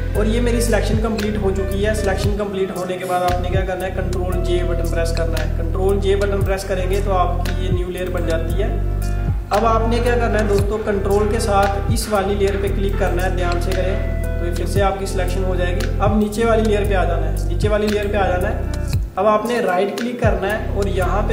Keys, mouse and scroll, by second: 0.8-1.2 alt+scroll down 2, 1.5 alt+scroll up 1, 6.5 click, 13.0 ctrl+click, 16.3 click, 19.6 right click.